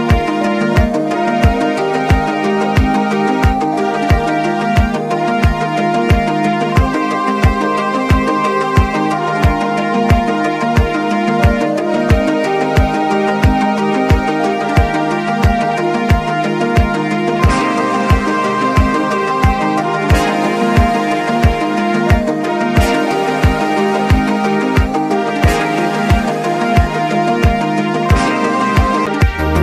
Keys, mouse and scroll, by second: 1.1 right click, 2.0 typing, 3.4 click, 3.4 typing, 7.1 click, 7.1 typing, 8.0 ctrl+z, 8.6 click, 10.9 click, 12.2 space, 12.2 scroll down 1, 12.9 alt+scroll down 1, 13.2-14.4 drag, 15.4-16.5 drag, 17.9 click, 18.3 typing, 20.5 alt+scroll up 1, 21.0 click, 21.7 alt+scroll down 1, 22.7 alt+shift+click, 24.7 ctrl+z, 25.6-29.6 shift+drag.